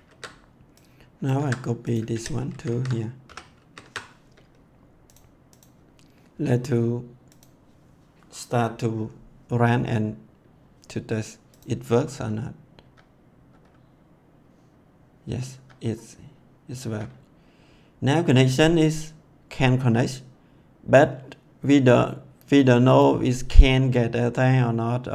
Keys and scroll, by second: 0.0 ctrl+s, 1.3 ctrl+c, 2.1 ctrl+v, 2.4 ctrl+s, 3.2 ;, 3.5 ctrl+s, 12.1 F10, 15.5 F10, 16.8 F10.